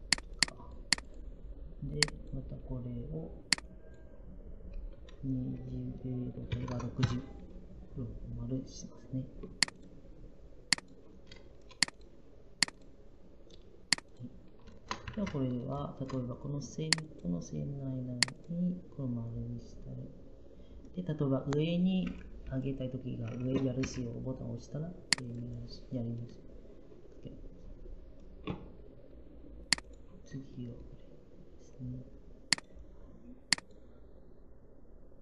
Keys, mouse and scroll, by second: 6.2-7.0 typing.